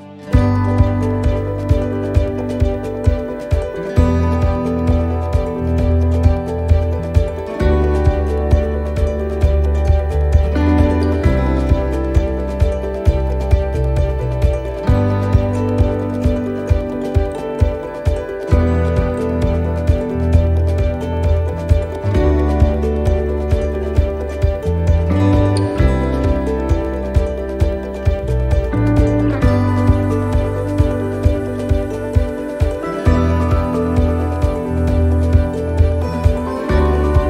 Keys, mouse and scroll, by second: 1.1 right click, 2.0 alt+shift+right click, 4.0 e, 5.2 shift+middle click, 5.7-6.5 scroll down 7, 6.0 middle click, 6.7 shift+middle click, 9.0 shift+middle click, 10.5 shift+middle click, 10.5 scroll up 3, 11.1 scroll up 6, 11.2 shift+middle click, 12.1 middle click, 13.2 click, 18.5 click, 18.5 s, 20.5 e, 24.1 e, 24.1 s, 26.4 click, 28.9 s, 31.4 click, 33.7 ctrl+r, 35.0 s.